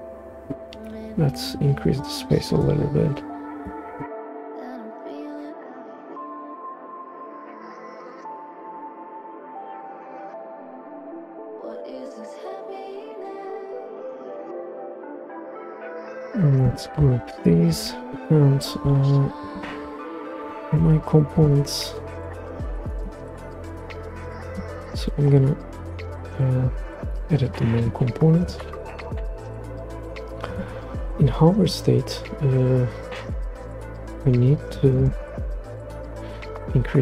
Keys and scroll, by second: 9.5 shift+super+g, 17.7 super+g, 33.4 Return.